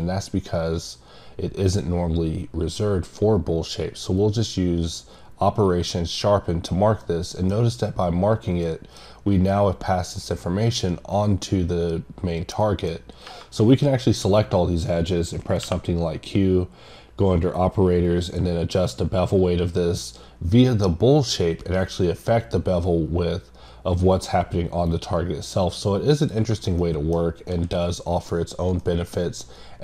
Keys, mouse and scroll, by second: 4.2 click, 7.0 middle click, 8.7 middle click, 9.5-10.0 scroll up 1, 10.7-11.4 scroll down 2, 12.6 middle click, 12.9-13.3 scroll up 1, 18.2-19.4 scroll up 1, 19.4 click, 24.6-25.0 scroll up 2, 26.0 scroll up 2, 26.2 click, 26.8 middle click, 28.8 middle click, 29.1 scroll down 2.